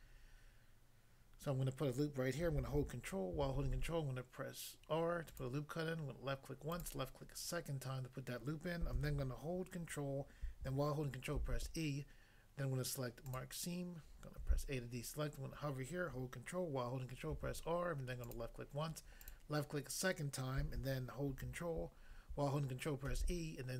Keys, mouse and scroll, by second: 3.6 ctrl+r, 5.3 click, 5.4 click, 6.7 click, 6.9 click, 11.4 ctrl+e, 13.3 click, 14.3 a, 17.3 ctrl+r, 18.2 click, 19.2 click, 23.1 ctrl+e.